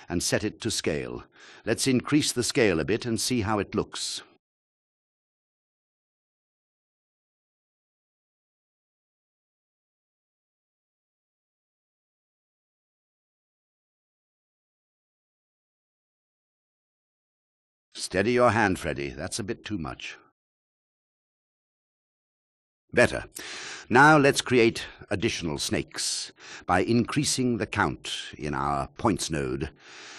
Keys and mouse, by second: 1.9 click, 2.8 click, 4.0 shift+a, 8.3-11.4 drag, 12.7 click, 12.9 click, 13.2 click, 13.3 click, 13.8-15.9 drag, 20.6 ctrl+click, 21.2 click, 24.1 drag, 24.5 click, 26.1 drag, 29.0 click.